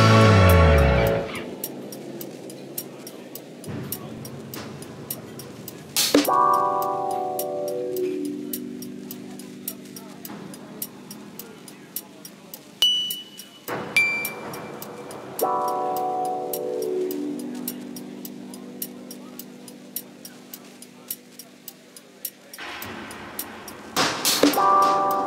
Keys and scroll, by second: 0.4 5, 0.8 4, 2.1 3, 3.5 F1, 3.7 F2, 15.6 4, 17.5 ctrl+z, 19.3 4, 20.5 3.